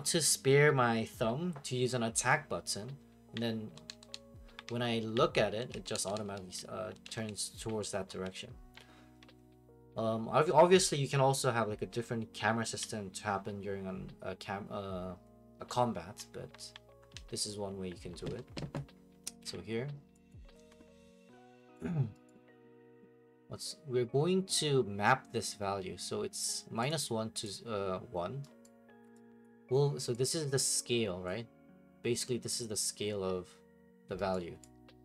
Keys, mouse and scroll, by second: 19.4 Escape, 20.3 click, 21.2 click, 21.7 right click, 22.3 right click, 26.9 click, 27.4 click, 28.6 right click, 29.4 click, 31.3 click, 34.3 right click.